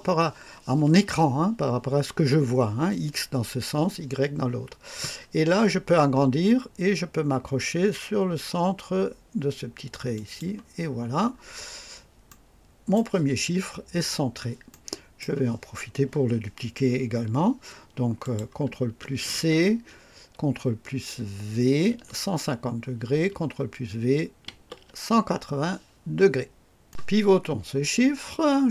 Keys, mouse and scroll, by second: 5.5-6.3 scroll up 4, 10.1 click, 10.8-11.8 scroll down 6, 12.2 right click, 13.9-14.3 scroll down 2, 14.6-15.3 right drag, 18.1 click, 19.2 c, 21.8 ctrl+v, 24.4 ctrl+v.